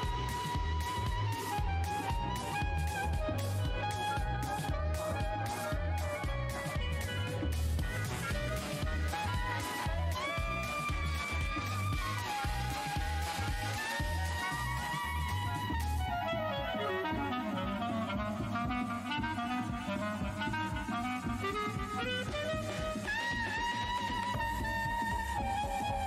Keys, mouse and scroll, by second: 0.3 shift+scroll down 2, 0.3 d, 0.7 alt+click, 0.7 w, 1.6 alt+w, 1.6 scroll down 2, 2.7-3.1 scroll down 1, 3.4 shift+click, 3.7 scroll down 1, 3.7 space, 5.1 alt+h, 5.9 right click, 6.2 click, 7.2 ctrl+click, 9.4 click, 11.2 scroll up 1, 12.2 click, 13.0 Delete, 13.8 alt+click, 14.7 right click, 15.0 ctrl+shift+h, 15.5 scroll down 1, 16.3-17.0 scroll, 17.2 space, 17.8 click, 18.8 ctrl+s, 24.4-25.4 scroll down 1, 25.4 click.